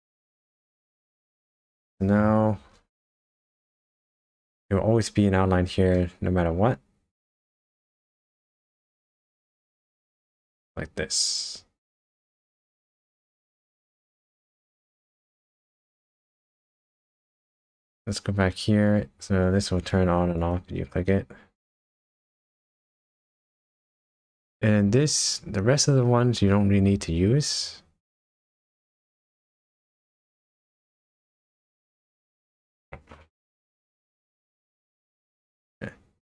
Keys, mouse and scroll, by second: 2.6 KP_0, 3.3 scroll down 2, 5.9 middle click, 8.4 middle click, 10.2 click, 10.7 middle click, 14.7 shift+middle click, 15.1 shift+middle click, 16.6 KP_0, 16.7 scroll up 2, 17.8 click, 19.8 click, 20.4 click, 22.6 click, 31.0 click.